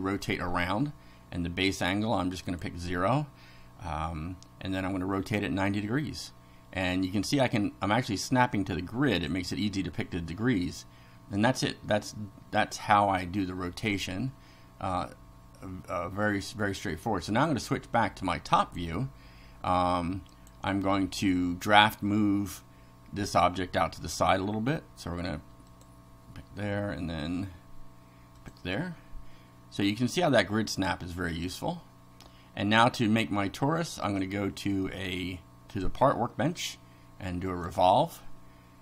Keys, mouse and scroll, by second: 2.4 click, 9.1 click, 17.3 click, 18.6 click, 20.3 click, 23.3 click, 25.7 click, 28.4 click, 34.1 click, 35.7 click, 37.5 click.